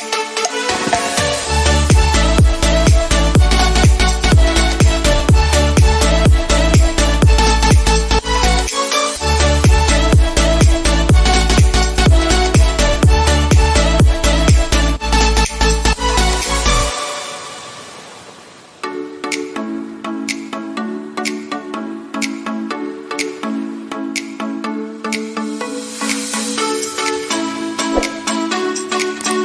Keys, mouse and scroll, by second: 0.7 click, 14.9 click, 18.8-20.4 drag, 20.4-21.9 typing, 21.6 click, 21.6 click, 22.1 click, 22.9 click, 25.6 click, 27.3 click.